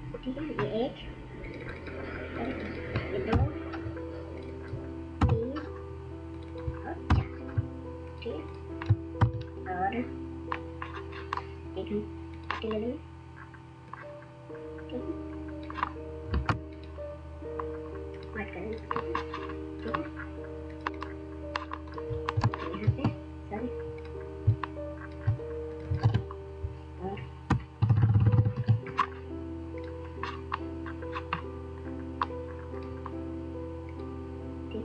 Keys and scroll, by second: 3.3 2, 5.2 3, 7.1 4, 9.2 ctrl+0, 22.5 ctrl+space, 22.8 ctrl+space, 22.9 ctrl+space, 23.0-26.6 ctrl+space, 26.1 ctrl+a, 27.6 8, 28.0 8, 28.5 8, 28.6 ctrl+a.